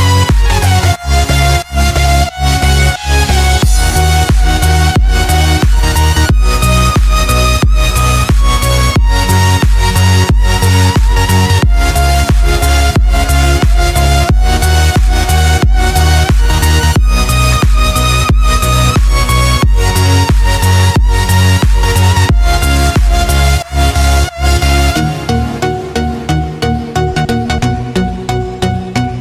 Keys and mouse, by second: 4.4-11.3 middle drag, 17.3-18.4 middle drag, 18.9 click, 22.3 g, 25.3-27.1 middle drag, 28.1-28.9 shift+middle drag.